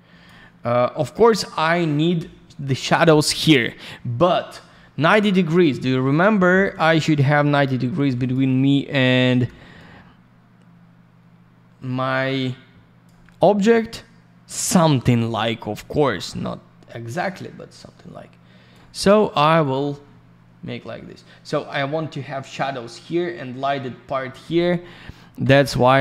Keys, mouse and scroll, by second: 5.8 alt+middle click, 6.8 alt+n, 7.0 click, 7.3 alt+middle click, 7.9 alt+n, 8.1 click, 8.4 alt+middle click, 9.7 click, 13.2 alt+middle click, 16.2 click, 19.6 click, 19.7 click, 21.8 scroll up 1.